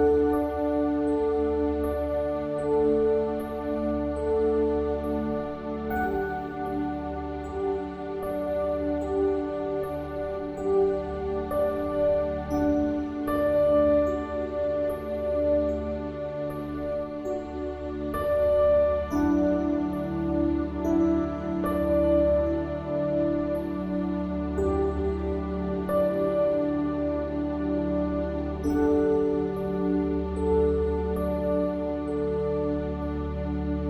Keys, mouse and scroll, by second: 0.5-1.7 drag, 1.9 click, 4.0 middle click, 4.7 click, 5.2 r, 6.8 click, 7.0 middle click, 7.6 r, 8.7 Tab, 9.1 click, 10.8 KP_1, 12.4 h, 13.8 alt+h, 14.2 shift+d, 14.8 click, 15.9 click, 16.3 h, 16.7 Tab, 18.8 a, 19.0 s, 20.3 s, 21.2 middle click, 21.7 click, 22.9 s, 24.1-25.4 drag, 25.3 ctrl+z, 26.5 KP_1, 27.3-29.0 middle drag, 29.5 r, 31.1 click, 31.3 right click, 31.8 ctrl+z, 31.9 ctrl+z, 32.5 e.